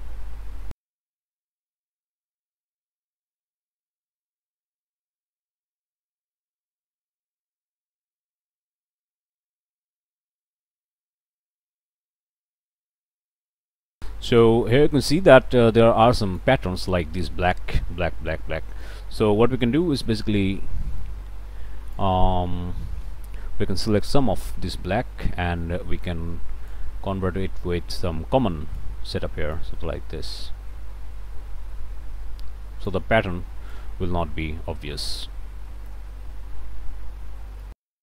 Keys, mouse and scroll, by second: 0.9 click, 1.4 right click, 1.9 click, 2.9 right click, 3.4 click, 3.9 right click, 4.9 click, 5.3 right click, 6.2 click, 6.5 right click, 6.6 click, 7.3 click, 7.6 right click, 7.9 middle click, 8.1 click, 8.8 click, 9.6 right click, 9.9 right click, 10.3 click, 10.9 right click, 11.2 click, 11.6 right click, 12.1 click, 12.8 right click, 13.2 middle click, 14.1-16.6 right drag, 18.8-20.2 right drag, 20.4 middle click, 21.0-22.2 right drag, 22.5 middle click, 23.6 right click, 24.8-26.9 right drag, 27.6-29.0 right drag, 29.6-33.1 right drag, 33.2 right click, 34.2 middle click, 34.2 scroll up 1, 35.2 right click, 36.2 middle click, 36.2 scroll up 1, 37.2 middle click.